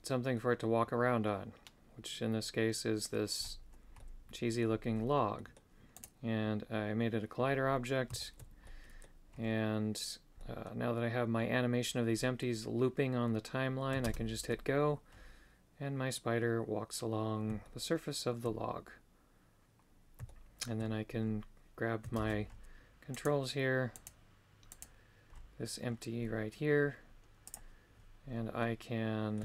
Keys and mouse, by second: 0.3-3.1 middle drag, 4.0 middle click, 5.4 middle click, 6.0 right click, 8.2 shift+middle click, 8.6 middle click, 10.4 middle click, 17.7 shift+middle click, 20.3 shift+middle click, 23.3 right click, 23.3 shift+space, 23.9 right click, 27.4 click, 28.6 middle click.